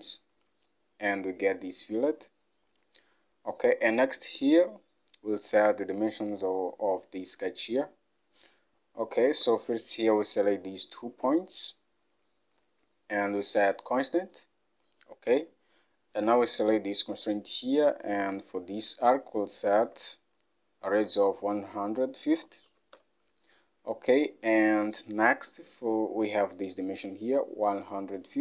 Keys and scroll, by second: 9.5 Escape, 19.9 alt+Tab, 22.4-22.7 typing, 23.0 Return, 25.6 alt+Tab.